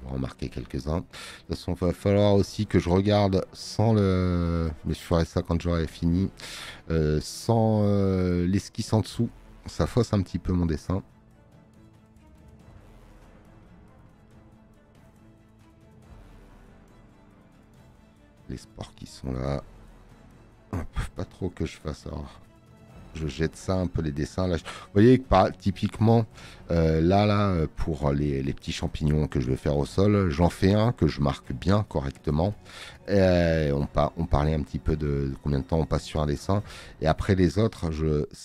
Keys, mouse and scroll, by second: 2.7 click, 6.1 space, 6.1 click, 28.1 space.